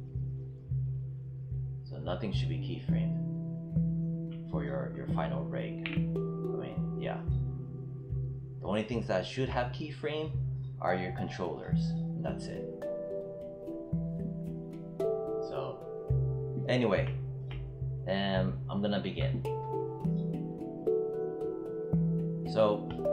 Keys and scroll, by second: 6.3 w.